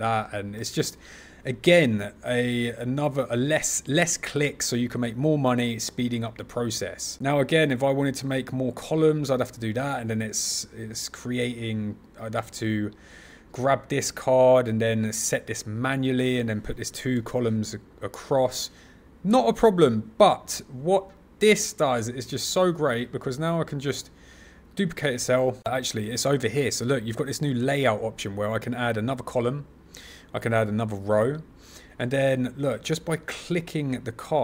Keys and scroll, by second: 0.5 super+z, 25.0 super+c, 25.2 super+v.